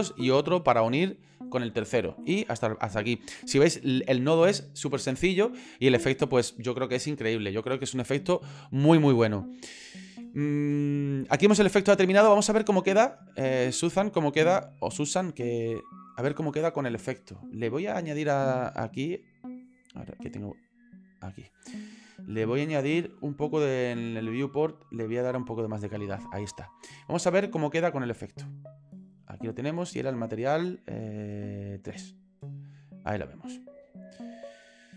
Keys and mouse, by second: 12.2 shift+middle click, 14.9 click, 18.6 click, 21.0 click, 22.6 click, 23.9 click, 29.2 click.